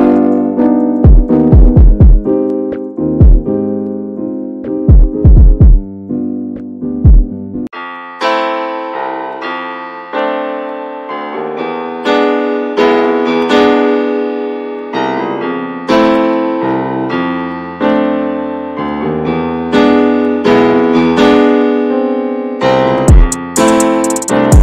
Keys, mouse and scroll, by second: 0.0 click, 0.7 shift+middle click, 0.9 click, 1.1 /, 1.6 middle click, 1.8-2.9 scroll up 1, 2.9-3.9 scroll up 2, 3.9 click, 4.5 scroll down 2, 4.7-7.0 middle drag, 7.0-8.2 drag, 9.2 click, 9.6 middle click, 9.9-10.5 scroll up 1, 10.5 click, 10.8 scroll down 1, 11.0 middle click, 11.2 Tab, 11.6 p, 12.0 Tab, 12.1 click, 13.0 click, 13.5 alt+z, 13.8 alt+z, 14.6 click, 14.8 /, 15.4 /, 15.8 middle click, 15.9 Tab, 16.1-17.1 scroll up 3, 16.4 shift+middle click, 17.1-17.4 scroll up 1, 17.4 alt+shift+click, 17.8 alt+shift+click, 18.4 alt+shift+click, 18.7 alt+shift+click, 19.5 alt+shift+click, 19.8 middle click, 20.2 ctrl+z, 20.6 alt+shift+click, 21.0 alt+shift+click, 21.7 alt+shift+click, 22.5 alt+shift+click, 22.7-24.6 shift+middle drag.